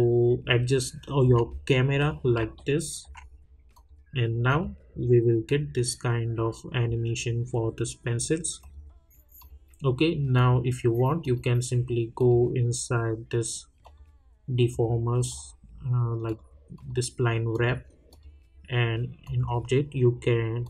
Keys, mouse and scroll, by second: 1.5 scroll up 1, 2.5 alt+middle click, 3.7 click, 8.6 click, 8.6 click.